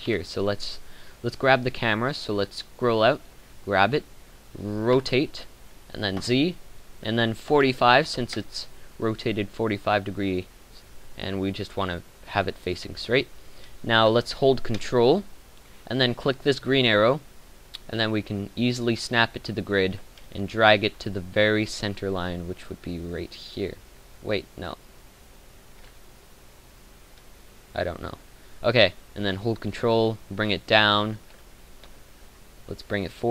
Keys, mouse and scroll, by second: 0.0 Escape, 5.0 r.